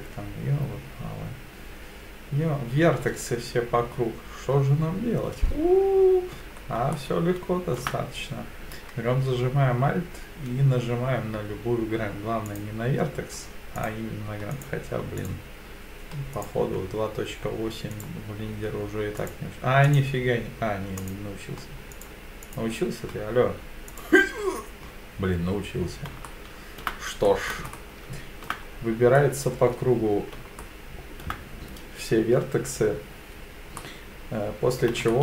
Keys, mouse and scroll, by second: 6.4-6.8 scroll up 4, 6.9 shift+middle click, 12.5 alt+click, 13.8 click, 14.5 click, 15.2 alt+click, 16.3 click, 17.9 alt+click, 19.2 alt+click, 19.9 alt+click, 21.0 alt+click, 21.9 click, 22.4 click, 23.9 alt+click, 26.3 shift+middle click, 27.3 middle click, 27.7 shift+middle click, 28.7-29.6 scroll down 3, 29.2 middle click, 30.6 shift+middle click, 33.8-34.8 middle drag, 35.1-35.2 shift+middle drag.